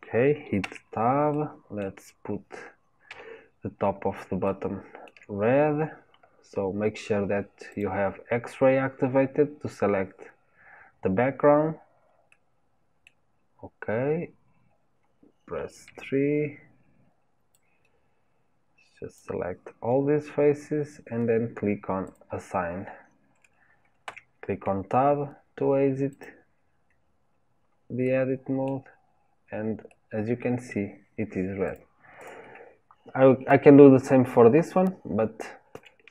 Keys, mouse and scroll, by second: 0.7 Tab, 1.3 middle click, 2.2-3.1 scroll up 2, 3.1 KP_3, 3.8-4.4 scroll up 4, 4.5-6.2 shift+middle drag, 6.2-7.7 scroll up 1, 7.7 scroll up 1, 7.8-12.3 drag, 12.3-15.9 middle drag, 15.9 KP_3, 19.2 click, 22.1-24.1 drag, 24.1 Tab, 26.2 click, 28.0 middle click, 28.9-29.9 scroll down 3, 29.9-31.7 middle drag, 31.7 click, 32.3 click, 35.7 Delete.